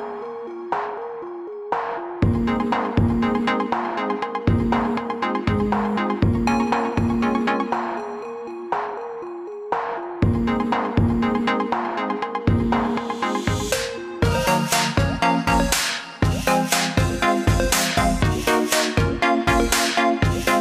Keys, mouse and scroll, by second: 3.2 click, 7.4 i, 8.0 click, 10.7 click, 13.6 i, 14.3 click.